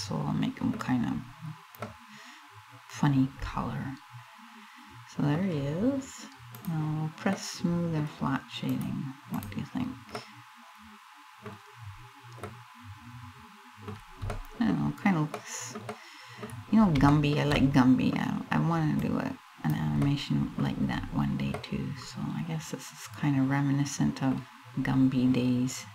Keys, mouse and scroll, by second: 0.8 scroll up 1, 1.4 middle click, 6.1 click, 6.9 middle click, 8.3 click, 8.9 click, 9.8 middle click, 11.6 scroll up 2, 12.1 middle click, 13.6 scroll down 3, 14.0 middle click, 15.0 middle click, 15.6 middle click, 16.7 shift+middle click, 17.2 middle click, 18.6 click, 19.7 middle click, 20.6 scroll up 3, 21.2 middle click, 24.5 scroll up 1, 25.8 scroll up 1.